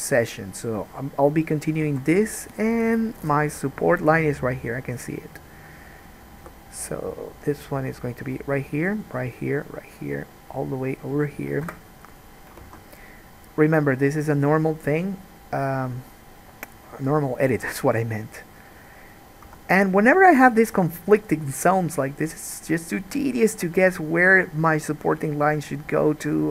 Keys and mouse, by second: 2.2 alt+a, 6.6 k, 12.8 alt+a, 19.6 3, 19.9 click, 21.4 click, 21.8 click, 22.7 click, 23.2 click.